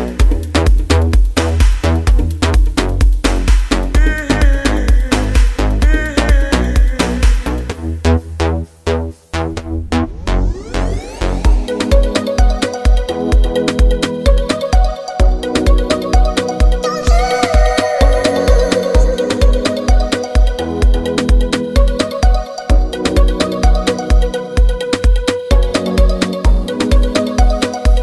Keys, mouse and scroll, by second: 11.5 ctrl+f.